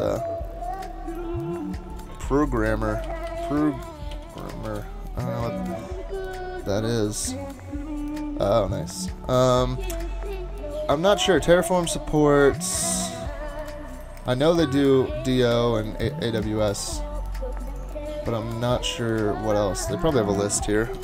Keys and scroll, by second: 2.3 super+t, 2.7-4.7 typing.